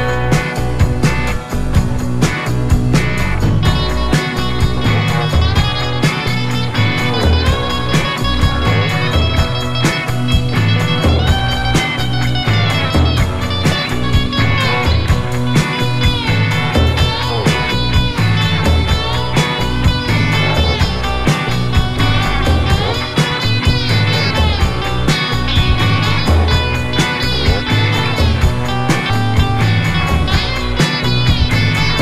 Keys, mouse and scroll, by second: 0.4 click, 3.9 click, 5.5 click, 9.9-10.3 alt+scroll down 2, 10.7 right click, 12.7 click, 15.0 Return, 16.8 click, 22.9-23.3 alt+scroll up 1, 23.5 alt+scroll up 1, 26.5 click, 27.1 Up, 29.5 Left, 30.1 Down, 30.5 Right, 30.9 Down, 31.3 Right, 31.5 Down, 31.6 Right.